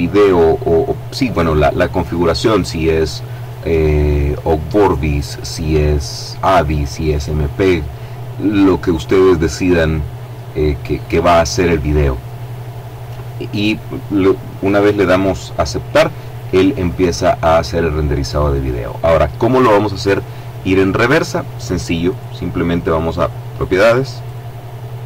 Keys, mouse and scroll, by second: 24.2 click.